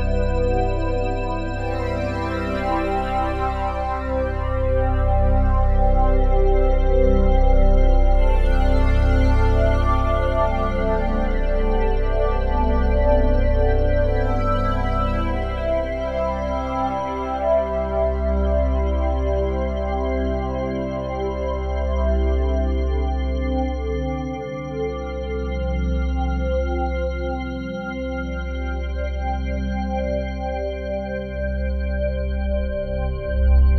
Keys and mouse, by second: 2.1-4.1 drag, 4.1 s, 5.3 Escape, 6.2 s, 6.6 0, 6.9 Return, 9.2-12.9 drag, 13.2-16.8 drag, 17.5-19.6 drag, 21.9 space, 22.7-30.0 drag, 31.4 ctrl+s, 33.0-33.7 drag.